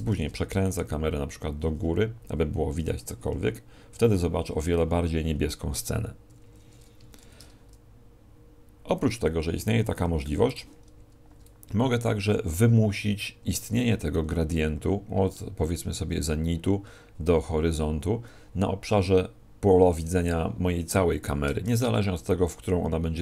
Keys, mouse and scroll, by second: 0.1 shift+f, 3.1 click, 6.3 Escape, 7.2 shift+f, 10.6 click, 13.4 Escape, 21.6 shift+f.